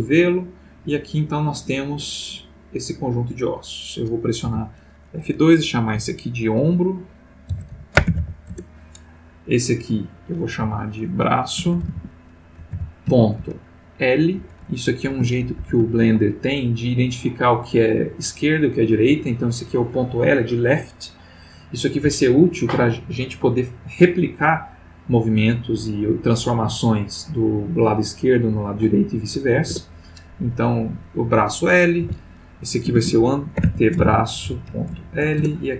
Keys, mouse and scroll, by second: 3.4 click, 4.4 F2, 7.5-8.1 typing, 8.5 shift+Return, 9.8 click, 10.6 F2, 11.6-13.1 typing, 14.3 shift+l, 15.4 shift+Left, 29.7 Return, 31.1 click, 32.0 F2, 32.9-35.0 typing, 35.3 shift+Return.